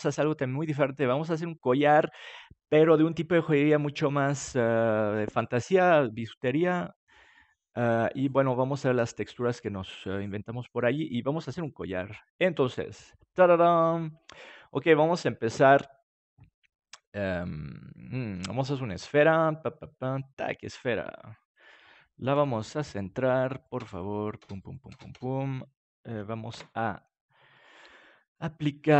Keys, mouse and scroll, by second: 17.0-22.4 drag, 22.4 n, 23.2 middle click, 23.6-26.5 drag, 26.5 ctrl+a.